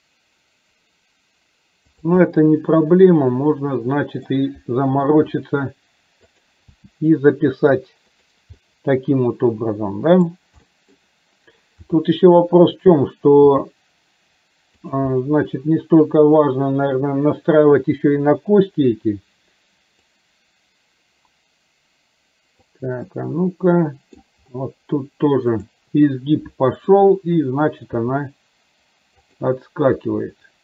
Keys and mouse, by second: 2.4-4.4 middle drag, 5.4 r, 6.8 g, 8.6-10.4 middle drag, 10.7 middle click, 11.8 r, 13.6 g, 15.3-16.5 middle drag, 20.2-22.7 drag, 23.1-24.2 middle drag, 25.5 click, 26.8 click, 28.0 g, 30.1 r.